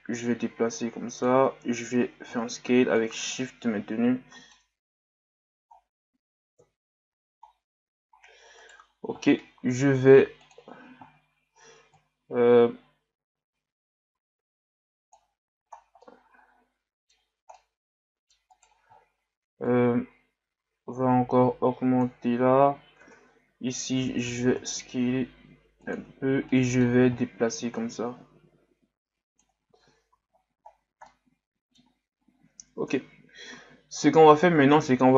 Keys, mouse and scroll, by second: 2.0 s, 3.4-4.6 middle drag, 4.6 Tab, 5.8-6.5 scroll down 2, 6.6 KP_1, 7.4-7.8 scroll down 1, 8.1-8.6 scroll up 1, 8.6 right click, 10.4-15.0 drag, 15.8 scroll down 2, 16.0-17.2 middle drag, 17.2-17.5 scroll up 1, 17.5-18.5 middle drag, 18.5 right click, 19.7-22.7 shift+drag, 26.5-27.8 middle drag, 27.8-29.7 drag, 29.7 Tab, 30.1 a, 30.3-31.1 scroll down 10, 31.1-32.8 middle drag, 32.8 KP_1.